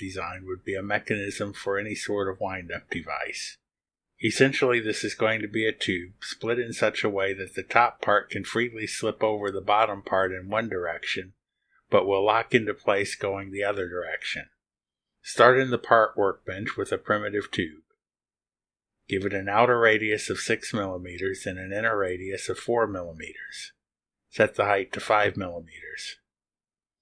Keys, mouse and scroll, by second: 17.8 click, 19.8 click, 20.8 6, 21.3 click, 22.5 4, 25.1 click, 26.1 5.